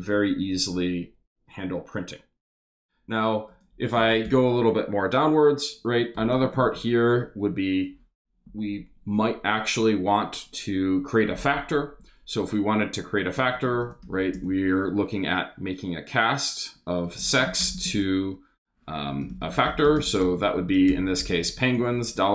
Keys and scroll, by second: 4.2 Return, 6.1 shift+3, 6.4 shift+space, 13.1-14.5 typing, 16.8-22.3 typing.